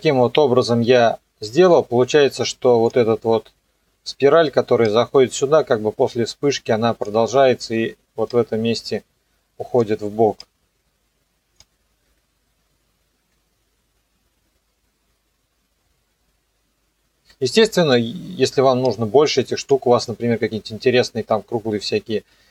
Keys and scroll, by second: 12.1 KP_0, 13.2 KP_0, 17.2 KP_0.